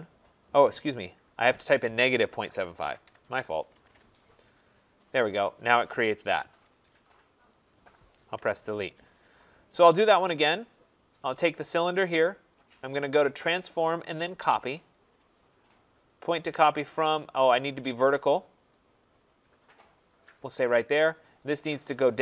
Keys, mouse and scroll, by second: 1.8-4.2 typing, 6.2 Return, 7.4 click, 8.3 Delete, 9.6-11.7 scroll, 11.8 click, 13.4 click, 14.9 click, 17.7 click, 20.6 click.